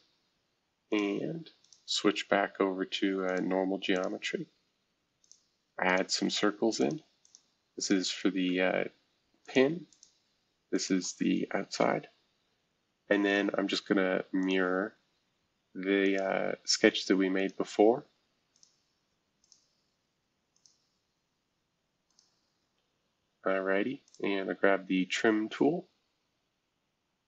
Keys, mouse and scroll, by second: 0.9 click, 1.6 click, 3.2 click, 3.9 click, 5.2 click, 5.9 click, 6.3 Escape, 7.2 click, 7.8 shift+click, 8.3 e, 9.4 click, 9.9 click, 10.0 typing, 11.2 typing, 14.4-16.0 drag, 16.0-22.7 drag, 22.7 Escape, 24.0-25.6 drag, 25.6 Escape.